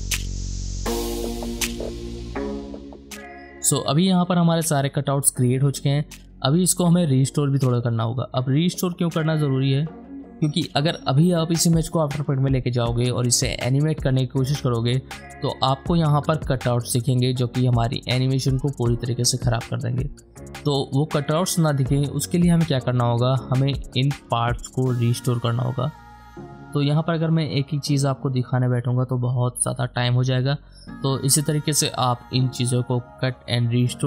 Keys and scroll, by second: 0.2 alt+], 0.7 alt+space, 0.9 alt+space, 1.6 ctrl+d, 1.6 alt+space, 1.8-3.2 typing, 28.8 ctrl+d, 29.1 shift+Return, 29.2 ctrl+space, 30.0 ctrl+alt+d, 30.7 shift+Return, 30.9 ], 31.1 space, 31.7 ctrl+shift+z, 32.3 ctrl+space, 32.7 ctrl+z, 33.1 ctrl+j, 33.3 e, 33.4 ctrl+alt+z, 33.8 alt+space.